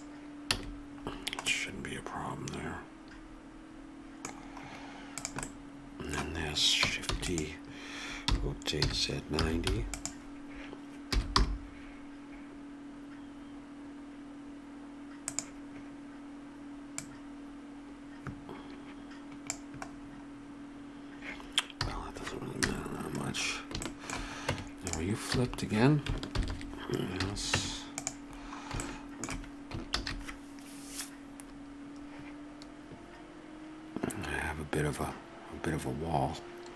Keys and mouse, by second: 0.5 a, 3.5 middle click, 4.4-5.5 right drag, 5.5-7.0 middle drag, 7.1 shift+d, 8.2 r, 11.1 g, 17.0-19.4 drag, 19.9-21.7 middle drag, 21.8 a, 22.6 KP_0, 24.5 Tab, 25.5 a, 26.3 ctrl+n, 27.2 a, 27.6 Tab, 28.5-29.5 middle drag, 30.1 shift+z.